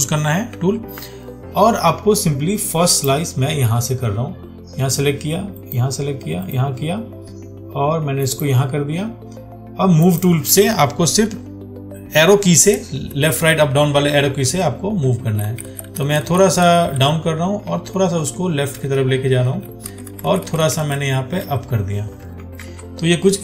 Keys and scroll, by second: 0.9 ctrl+1, 22.9 ctrl+d.